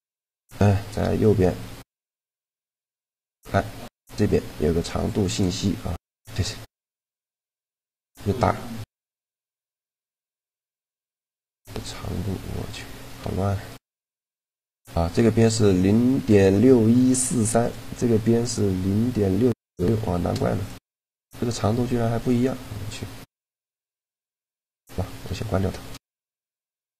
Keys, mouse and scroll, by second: 0.7 n, 1.2 n, 2.4-4.4 middle drag, 4.9-6.8 drag, 6.8 middle click, 13.0 a, 13.6-15.2 right drag, 17.4-19.2 right drag, 19.8 shift+g, 24.6-26.2 drag, 25.2 right click, 26.4 a.